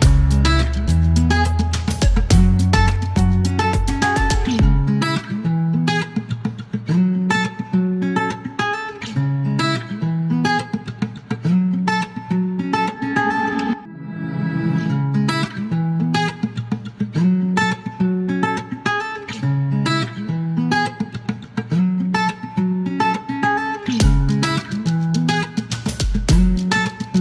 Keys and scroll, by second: 0.0-0.9 typing, 2.1 typing, 4.5 KP_9, 5.9-8.0 typing, 10.7-12.3 typing, 13.6 typing, 19.6 h, 21.6 alt+k, 22.4 space, 23.8 alt+k, 24.4 space, 26.3 alt+q, 27.1 q.